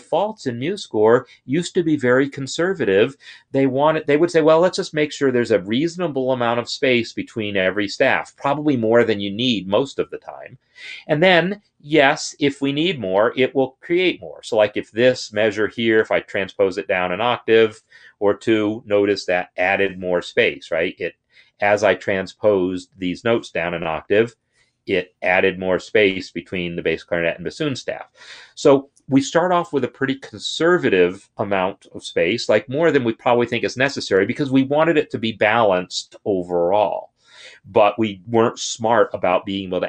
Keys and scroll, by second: 16.0 ctrl+Down, 16.7 ctrl+Down, 20.2 ctrl+Up, 24.0 ctrl+Down, 24.1 ctrl+Down, 27.8 ctrl+Up.